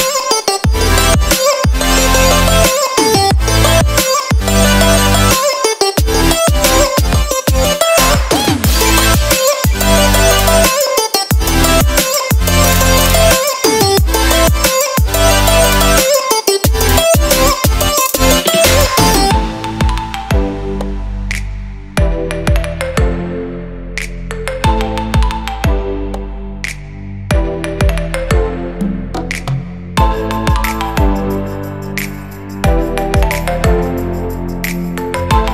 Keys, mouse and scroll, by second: 1.0 click, 3.7 click, 6.6 ctrl+middle click, 7.7 click, 9.6 scroll up 1, 10.6 click, 10.6 scroll up 7, 11.7 click, 13.5 click, 14.6 click, 16.6 click, 18.1 click, 19.1 ctrl+middle click, 19.5 middle click, 21.1 shift+middle click, 21.3 middle click, 22.2-22.8 scroll down 5, 22.5 middle click, 23.0 click, 23.3 shift+middle click, 23.6 g, 24.0 shift+middle click, 24.2 click, 24.4 shift+a, 28.0 click, 28.4 shift+d, 29.8 click, 31.2 click, 33.0 click, 34.9 ctrl+middle click, 35.4 middle click.